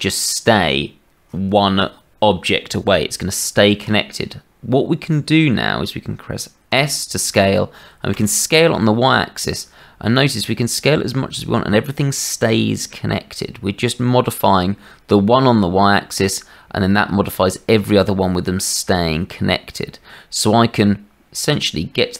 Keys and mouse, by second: 6.7 s.